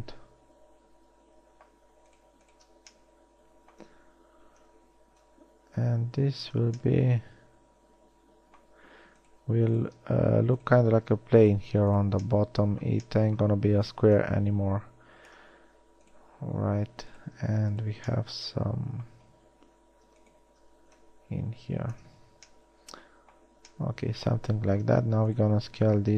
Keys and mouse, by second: 22.6 a.